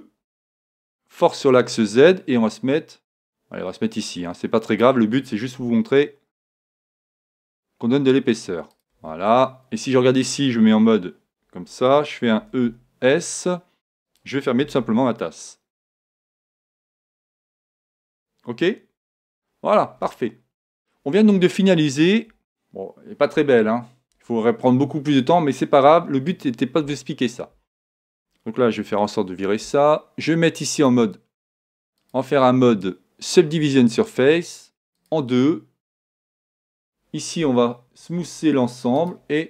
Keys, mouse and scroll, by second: 4.8-6.7 drag, 5.6 s, 8.9-10.8 drag, 9.5-11.2 middle drag, 10.6 z, 12.4 e, 14.6 e, 16.0-17.7 drag, 16.5 e, 19.2 f, 19.5-21.7 middle drag, 21.1 Tab, 22.3 KP_1, 28.9 n, 30.8-34.0 drag, 35.0-36.7 drag, 35.9-37.7 right drag, 39.0-39.4 drag.